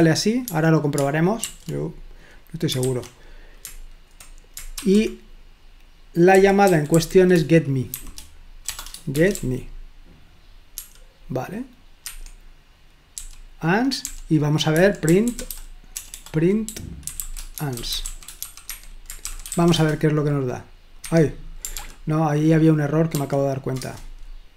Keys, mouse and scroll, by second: 0.0-2.8 typing, 6.1-10.8 typing, 12.1 Escape, 13.2-20.1 typing, 21.0 Escape, 21.8 ctrl+p, 23.1 ctrl+p, 23.8 Return.